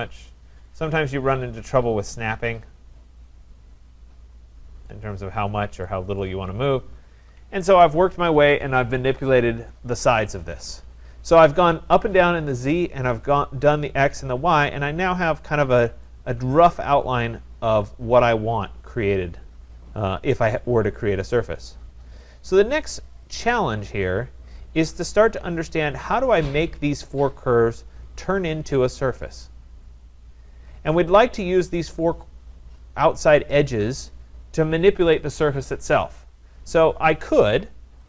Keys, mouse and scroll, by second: 0.1-3.1 scroll, 4.9 click, 5.5-7.1 scroll, 7.1 Escape, 7.4 Escape, 10.9-11.3 scroll, 15.3 scroll, 16.1 right click, 16.4-18.7 scroll, 20.0-20.5 scroll, 22.2 right click, 22.7 scroll, 24.6 scroll, 25.9 click, 27.0 click, 27.7 click, 28.7 click, 30.7 click.